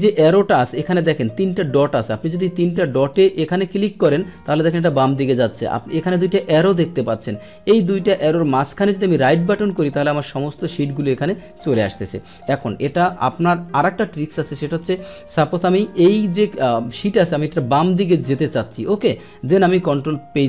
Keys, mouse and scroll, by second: 1.7 right click, 3.1 click, 3.7 click, 4.2 click, 4.5 click, 4.7 click, 4.9 click, 5.5 click, 8.6 right click, 9.6 right click, 12.3 click, 13.2 click.